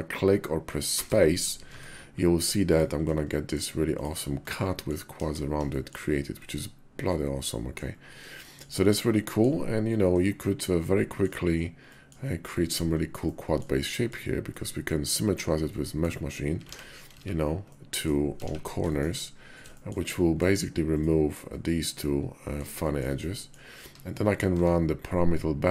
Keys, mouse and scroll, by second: 1.5 Tab, 3.0 middle click, 3.8 click, 4.3 middle click, 4.9 KP_5, 5.5 shift+click, 6.2 click, 6.6 middle click, 8.2 shift+middle click, 8.7 middle click, 10.0-11.1 middle drag, 11.6 middle click, 13.0 click, 13.6 middle click, 14.3 middle click, 15.5 middle click, 16.4 alt+x, 16.9 x, 17.3 click, 18.2 alt+x, 18.7 shift+click, 19.5 shift+click, 19.9 click, 21.8 click, 22.2 middle click, 22.6 shift+click, 23.0 middle click, 23.6 Tab, 24.3 q.